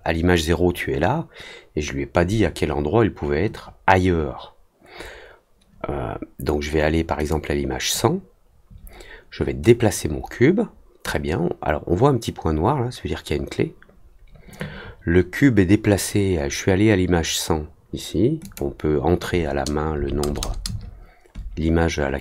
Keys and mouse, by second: 7.2 click, 9.6-11.0 drag, 18.4 click.